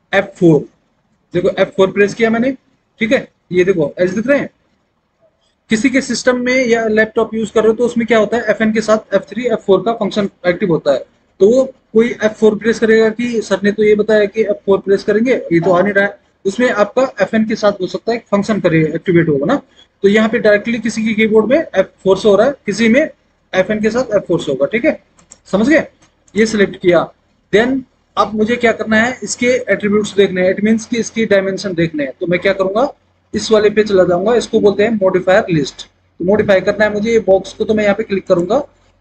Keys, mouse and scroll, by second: 1.4 F4, 21.8 F4.